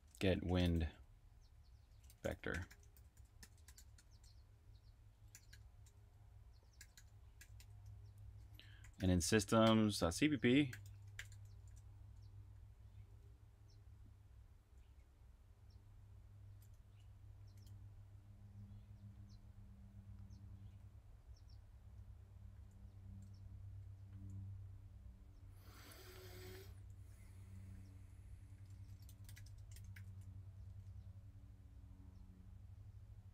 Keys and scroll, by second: 0.0-13.0 typing, 14.3-14.9 typing, 16.7-22.5 typing, 23.6-24.5 typing, 25.8-29.7 typing, 32.5-33.3 typing.